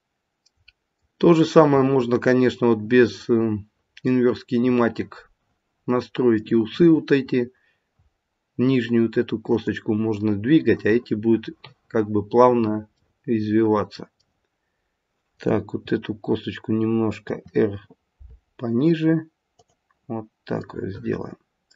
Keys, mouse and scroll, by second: 3.2 middle click, 6.0 middle click, 9.5 click, 12.9 middle click, 13.8 middle click, 15.2 click, 17.3 r, 20.7 middle click.